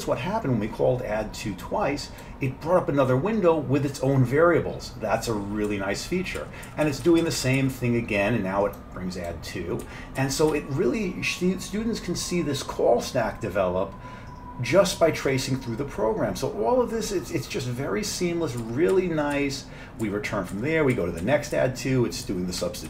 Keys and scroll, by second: 5.7 F7, 6.4 F7, 6.7 F7, 6.9-10.0 F7, 10.2 F7, 10.6 F7, 18.2 F7, 18.7 F7, 19.0 F7, 19.4 F7, 20.1 F7, 21.0 F7, 21.3 F7, 22.3 F7, 22.7 F7.